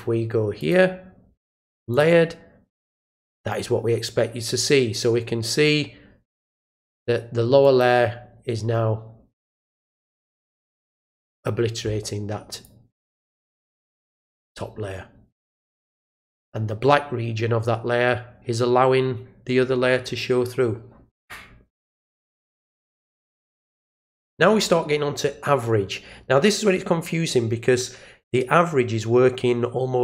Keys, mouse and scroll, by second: 0.6 click, 1.9 click, 7.6 click, 10.2 click, 12.5 click.